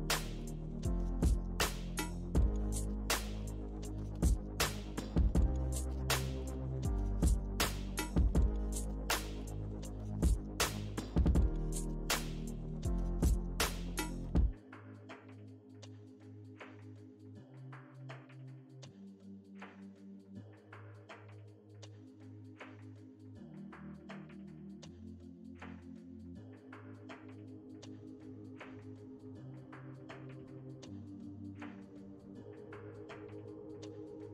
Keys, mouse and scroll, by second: 0.4 f, 1.1-2.5 ctrl+drag, 2.5-4.0 middle drag, 4.0 ctrl+r, 4.7 space, 5.4 f, 6.1-8.0 drag, 8.0 space, 8.5-10.2 drag, 10.2 middle click, 10.6 click, 11.5 middle click, 12.3 shift+c, 12.8 f, 13.6-16.1 drag, 16.1 middle click, 16.6 click, 16.8-17.9 middle drag, 17.9-18.9 drag, 18.9-21.2 middle drag, 21.4 f, 22.1-24.4 middle drag, 24.4 f, 25.5-27.6 ctrl+drag, 27.6 space, 28.1 f, 28.7-32.0 drag, 34.1 middle click.